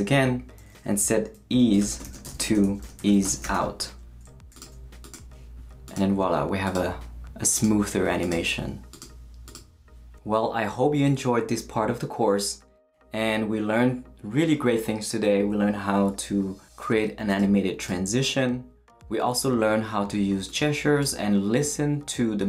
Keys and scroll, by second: 1.3-4.0 typing.